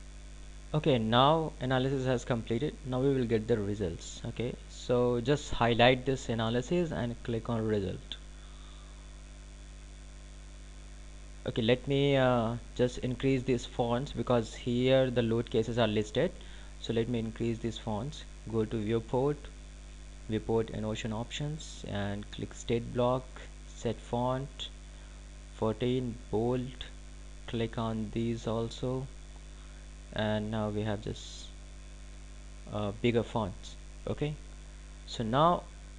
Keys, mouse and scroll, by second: 8.3 click, 11.1 click, 17.6 click, 20.6 click, 32.0 click.